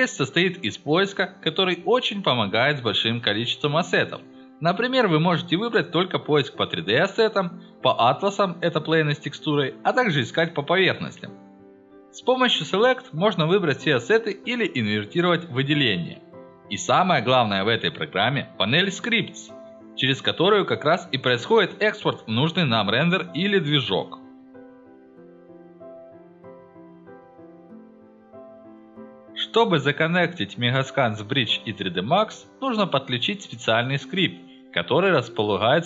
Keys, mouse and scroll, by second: 0.9 click, 2.0 click, 2.5 click, 9.8 click, 10.9 click, 11.3 click, 13.0 click, 15.5 click, 20.8 click, 22.3 click.